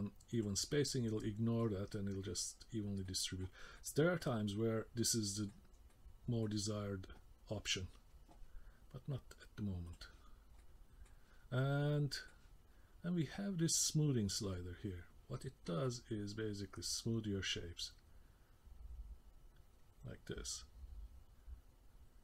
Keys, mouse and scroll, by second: 0.4 click, 0.9 middle click, 3.0 middle click, 3.8 middle click, 5.1 middle click, 5.9 middle click, 9.9 click, 10.3 scroll down 2, 10.6 middle click, 11.8 middle click, 14.6-15.8 scroll up 1, 15.8 click.